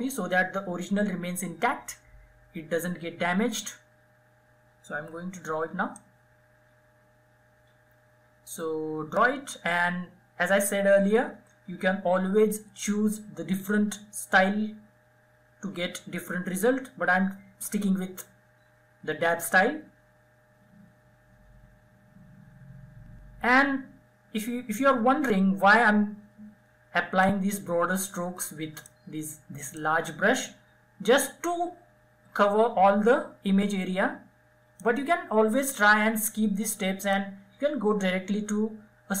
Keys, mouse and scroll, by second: 4.4 [, 5.2-15.2 drag, 27.3-39.2 drag.